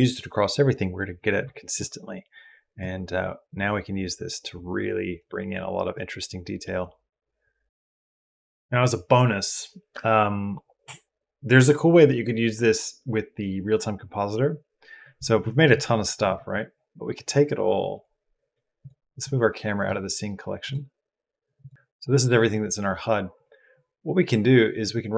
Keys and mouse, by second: 2.6 click, 4.6 click, 5.7-7.6 drag, 7.6 ctrl+s, 17.7 click, 18.6 click, 19.0 click, 20.5 click, 23.2 click, 24.6-25.1 drag.